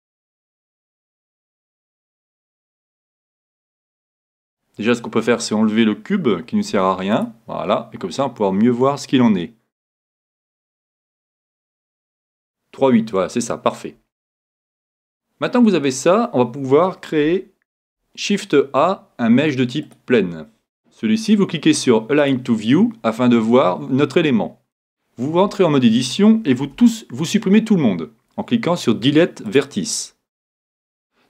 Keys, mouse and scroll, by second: 1.2-5.4 drag, 6.7 x, 11.5-13.3 drag, 14.1-16.5 middle drag, 22.2-24.0 drag, 24.1-25.4 drag, 25.4 Tab, 26.7 x.